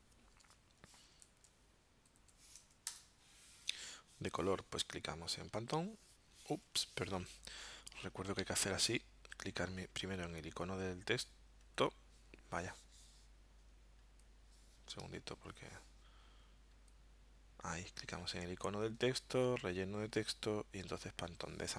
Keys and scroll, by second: 1.2 super+a, 2.1 9, 2.9 Return, 6.7 super+z, 8.4 alt+super+0, 15.1 alt+super+-.